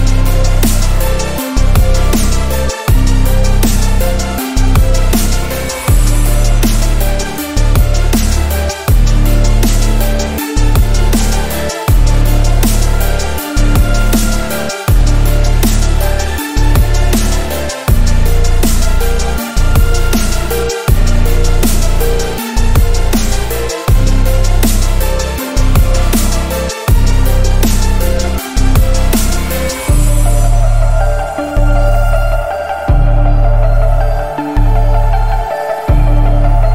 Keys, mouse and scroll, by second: 0.1-3.0 drag, 4.5-6.6 drag, 7.5-8.8 drag, 15.1-17.1 alt+scroll down 3, 17.1 click, 17.5-18.0 alt+scroll down 2, 18.0-18.4 scroll up 2, 19.9 click, 22.6 click, 24.2-26.4 drag, 34.4 ctrl+z, 35.1 click, 35.7-36.1 alt+scroll down 1, 36.1 space, 36.3 click.